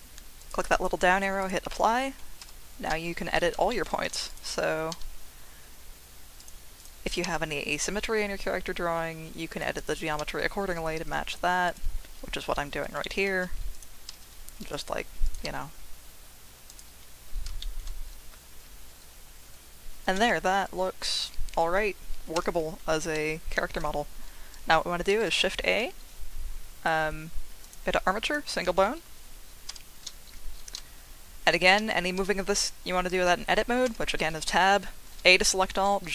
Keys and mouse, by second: 0.7-1.5 drag, 2.4 Tab, 3.7 shift+click, 4.9 g, 6.4 click, 7.2 g, 9.5 click, 10.2 g, 11.6 click, 13.0 shift+middle click, 14.1 g, 14.7 click, 15.2 click, 15.4 g, 16.7 click, 17.6 shift+middle click, 22.3 Tab, 25.1 shift+a, 29.8 Tab, 30.7 g, 31.6 Escape, 32.2 Tab, 33.8 Tab, 35.0 a, 35.7 g.